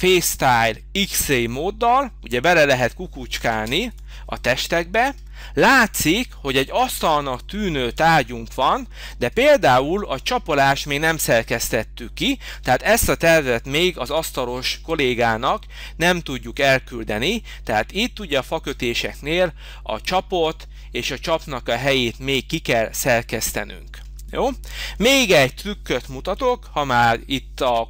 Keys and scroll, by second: 3.5 space, 26.3 h.